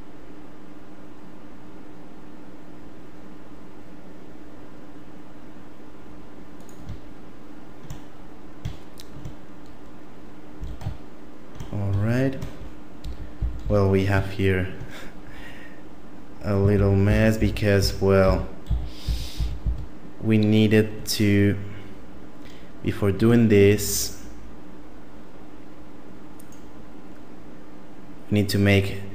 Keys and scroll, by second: 10.5 a, 13.0 ctrl+z, 13.4 ctrl+z, 13.6 ctrl+z, 16.7 ctrl+z, 17.1 ctrl+z, 17.3 ctrl+z, 17.8 ctrl+z, 18.2 ctrl+z, 18.7 ctrl+z, 19.0 ctrl+z, 19.3 ctrl+z, 19.6 ctrl+z, 23.1 Tab.